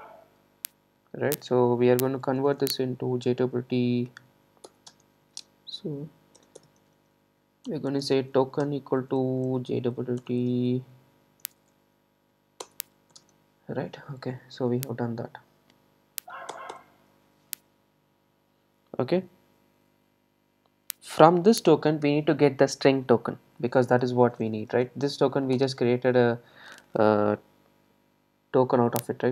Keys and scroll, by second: 4.7 Return, 12.6 Return, 25.6 Return.